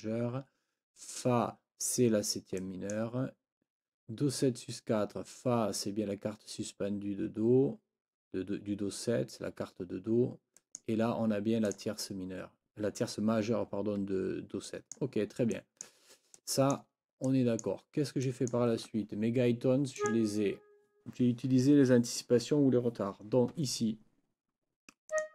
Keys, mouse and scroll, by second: 0.0 click, 2.6 click, 2.6-3.0 scroll up 4, 2.8 click, 3.0 click, 10.6 click, 11.7 click, 14.7 click, 15.5 click, 16.4 click, 17.3 click, 18.3 click, 20.0 click, 25.1 click.